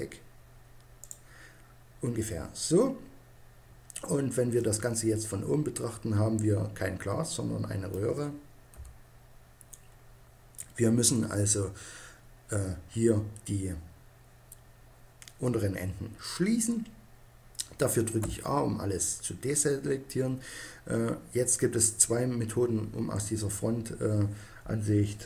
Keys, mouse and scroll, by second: 0.9-2.6 drag, 4.4-6.3 middle drag, 8.6 KP_1, 11.7-18.0 middle drag, 18.0 a.